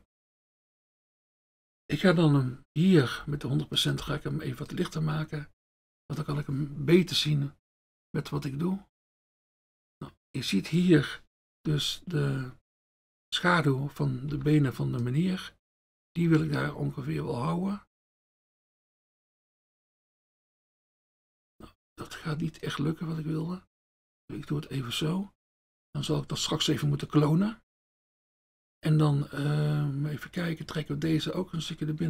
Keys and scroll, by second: 4.0 F1, 14.4 F1.